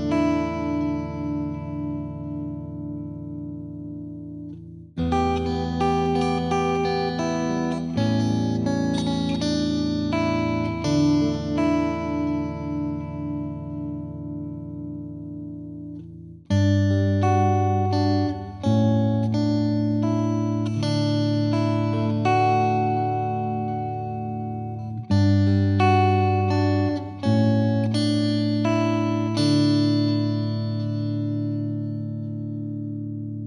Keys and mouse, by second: 0.9-2.0 drag, 3.5-4.6 drag, 6.6-7.8 drag, 8.5 F3, 9.1 F3, 10.3-11.4 drag, 13.2-14.4 drag, 14.1 F2, 17.8 click, 22.3 click, 23.3 click, 23.9 click.